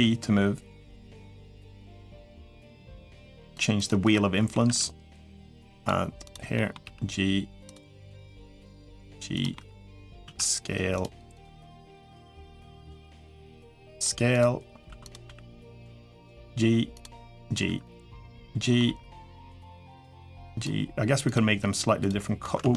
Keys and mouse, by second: 3.5 click, 3.9 middle click, 5.2 r, 6.0 click, 6.3 middle click, 6.6 g, 8.4 click, 8.6 g, 9.3 middle click, 10.0 s, 11.2 click, 11.8 click, 12.4 3, 12.8 s, 14.7 1, 14.9 click, 15.0 g, 15.9 click, 16.4 g, 17.3 click, 17.4 g, 18.3 middle click, 18.6 g, 19.7 click, 19.9 g, 21.8 g, 22.6 ctrl+z, 22.6 middle click.